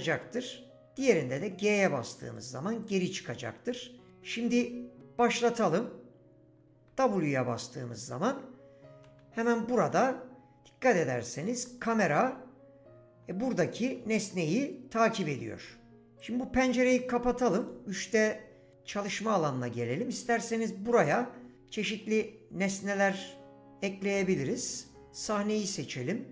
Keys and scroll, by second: 1.0 g, 6.9 w, 9.3 s, 11.9 w, 14.0 s.